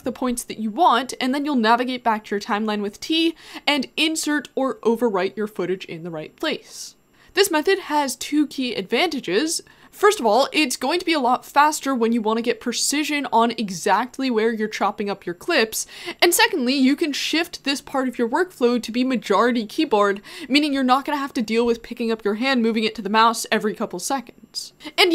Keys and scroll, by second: 0.0-2.8 typing.